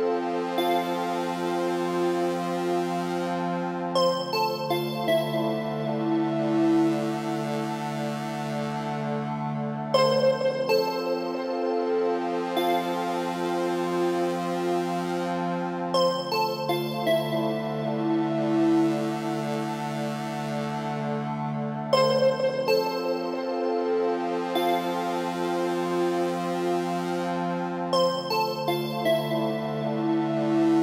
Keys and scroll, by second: 20.7 Up, 26.6 Right, 28.2 Left, 30.6 Up.